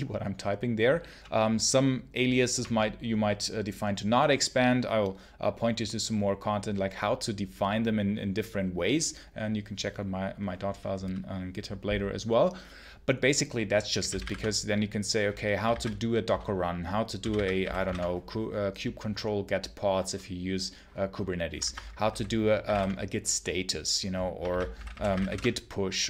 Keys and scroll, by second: 1.1 BackSpace, 13.6-14.6 typing, 15.6 ctrl+c, 16.8-18.2 typing, 21.5 ctrl+c, 22.0-23.1 typing, 24.3 ctrl+c, 24.4-25.6 typing.